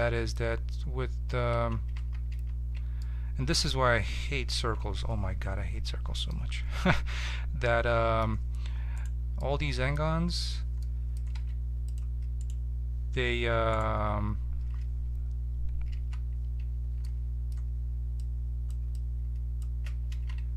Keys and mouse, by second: 1.3 Tab, 2.0 ctrl+z, 2.3 ctrl+z, 4.6 n, 5.9-8.9 middle drag, 8.9-10.0 right drag, 11.3 ctrl+Tab, 15.9 f, 18.2-20.5 drag, 20.1 ctrl+z.